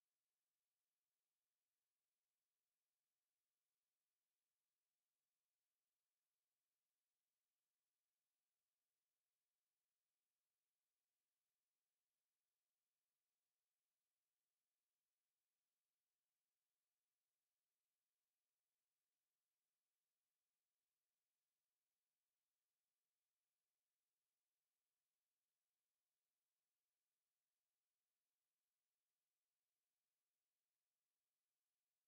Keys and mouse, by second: 0.6 alt+click, 3.8 click, 4.2 alt+click, 5.0 click, 5.4 alt+click, 5.8 alt+right click, 9.4 alt+click, 9.9 alt+click, 10.7 click, 23.6 alt+middle click, 24.1 alt+click, 25.3 alt+middle click.